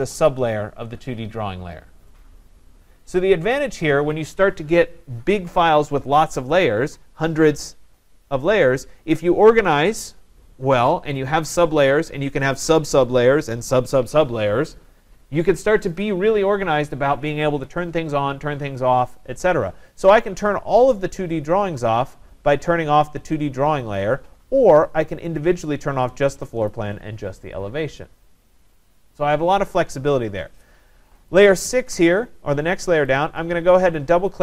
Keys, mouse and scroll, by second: 20.9 click, 25.2 click, 26.7 click, 31.3 click, 33.2 click, 33.4 click.